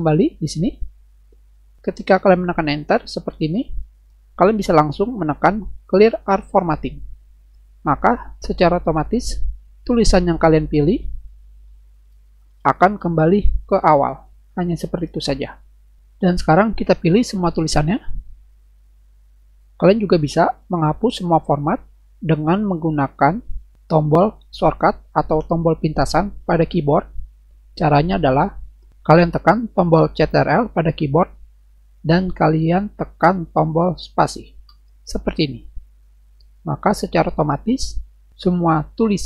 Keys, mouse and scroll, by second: 0.8 Delete, 2.8 Return, 6.6 click, 11.0-13.3 typing, 17.7-19.4 drag, 34.5 ctrl+space.